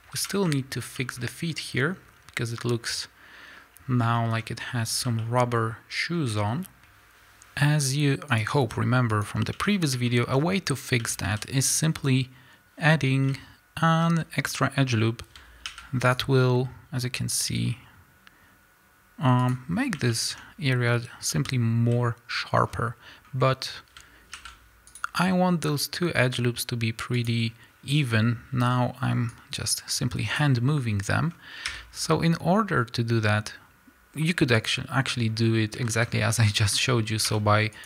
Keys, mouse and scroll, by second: 0.1 KP_1, 1.1-3.8 scroll up 2, 3.8-4.2 scroll up 1, 4.7-5.2 scroll down 2, 7.1 KP_Enter, 7.1-8.7 drag, 8.7-9.2 scroll up 1, 9.7 Tab, 10.1-19.5 shift+middle drag, 11.0 a, 14.0 z, 15.6 ctrl+r, 19.5 click, 19.8 scroll up 1, 20.1-27.5 shift+middle drag, 21.9 z, 22.7 scroll down 2, 23.2 scroll up 1, 24.4 ctrl+r, 27.5 click, 29.5-36.5 drag, 30.8 scroll down 1, 34.8 x, 35.3 scroll up 1, 35.7 a.